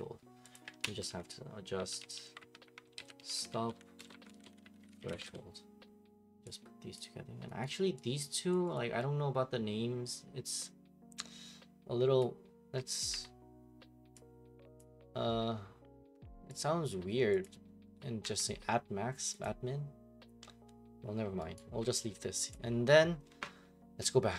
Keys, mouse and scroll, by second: 0.5 click, 0.8 ctrl+d, 1.5-5.6 typing, 6.9 click, 7.6 right click, 8.5 click, 8.7 click, 12.2 click, 13.0 click, 13.1 F2, 14.8 click, 16.6 click, 17.4 click, 18.2 F2, 19.4 click, 21.6 right click, 22.5 click.